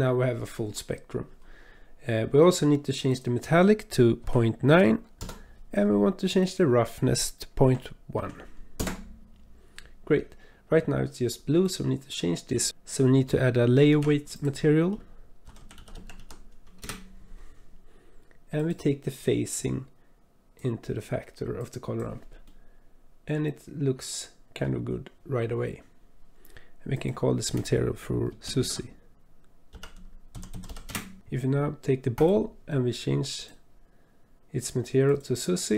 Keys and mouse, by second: 3.1-5.2 drag, 6.4-8.8 drag, 11.7 click, 12.6-13.7 drag, 13.9 shift+a, 19.7-20.6 drag, 21.6 click, 22.5-24.7 drag, 26.9-30.9 drag, 30.5 z, 33.3-35.2 drag.